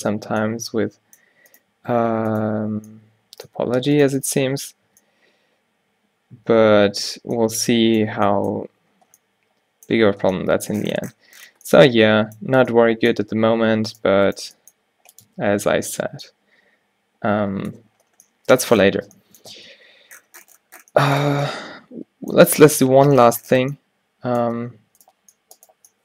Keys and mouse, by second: 0.3 Tab, 2.7-3.8 drag, 2.7 q, 4.6 q, 5.0 Tab, 7.1 middle click, 13.5 Tab, 14.5 g, 15.4 Tab, 18.8 a, 19.6 a, 21.3 Tab, 25.1-26.0 middle drag.